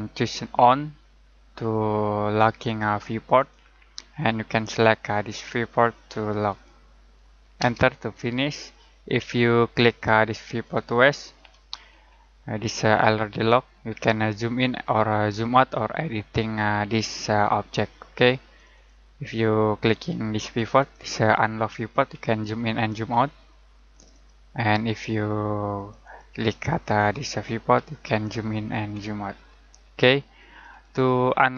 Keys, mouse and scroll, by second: 3.3 click, 6.4 click, 7.6 space, 10.6 click, 11.8 scroll up 1, 12.7-13.1 scroll down 1, 13.8-15.0 scroll up 1, 15.0-17.3 scroll down 1, 18.7 click, 22.1 scroll up 1, 22.5-22.9 scroll down 1, 23.1-23.9 scroll up 1, 23.9 click, 27.4-27.7 scroll up 1, 27.9 scroll down 1, 28.9 scroll up 1, 29.4 scroll down 1, 30.6 click.